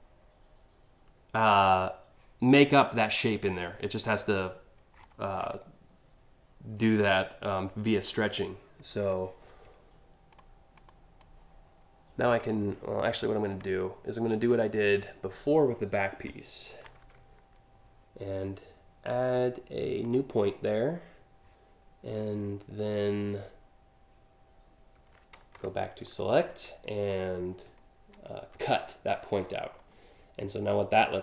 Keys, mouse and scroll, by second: 4.6-5.1 scroll down 5, 8.6 click, 9.9 click, 10.3 click, 10.8-12.1 drag, 12.7 ctrl+z, 14.0 click, 19.6 click, 25.1 a, 25.7 click, 28.1 ctrl+x, 29.1-29.4 scroll down 2, 30.5 click.